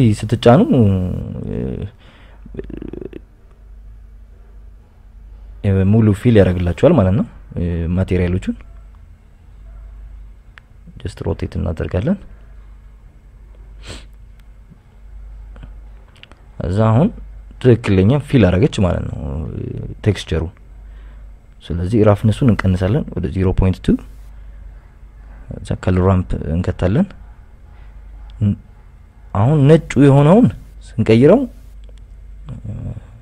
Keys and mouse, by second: 0.8 click, 1.5 Tab, 2.1 click, 2.7 KP_Subtract, 2.8 KP_Subtract, 3.6 click, 11.9 Tab, 12.8 r, 14.6 click, 15.3 g, 15.7 y, 17.3 click, 17.7 Tab, 18.3 click, 24.0-25.9 drag, 26.3 shift+a.